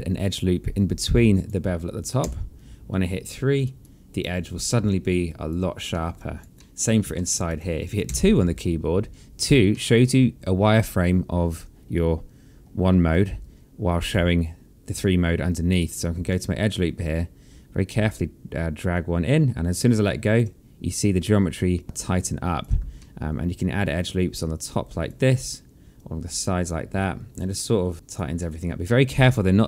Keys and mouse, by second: 0.7 click, 2.2 3, 3.5 click, 3.8 right click, 4.6 click, 4.8 alt+click, 5.9 alt+middle click, 6.2 alt+click, 6.6 alt+middle click, 7.1 alt+middle click, 7.5 click, 8.1 2, 9.7 alt+middle click, 15.7 click, 16.3 alt+middle click, 18.9 click, 21.8 click, 23.0 alt+middle click, 24.3 click, 26.0 click, 27.0 alt+click, 27.6 alt+middle click, 27.9 alt+click, 28.4 alt+middle click.